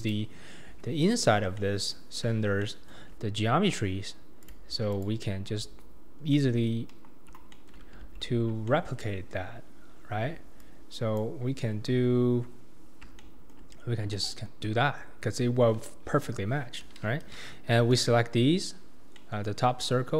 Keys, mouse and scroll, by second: 0.0 click, 0.7 Tab, 1.4 scroll down 1, 1.6-3.1 middle drag, 3.1-4.4 scroll up 2, 4.4 click, 4.9 alt+click, 6.2 scroll down 1, 6.3 middle click, 6.9 KP_1, 7.3 scroll down 2, 7.5 shift+middle click, 8.0 alt+z, 8.7-10.6 shift+middle drag, 10.6 shift+click, 13.2-17.3 shift+middle drag, 19.2 middle click, 19.7-20.1 scroll up 2.